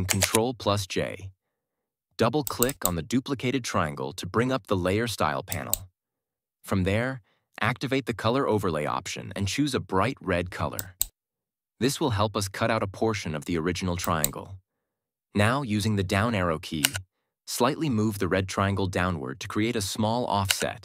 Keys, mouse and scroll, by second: 0.1 ctrl+j, 2.3 click, 5.4 click, 12.9 click, 13.9 click, 16.7 Down.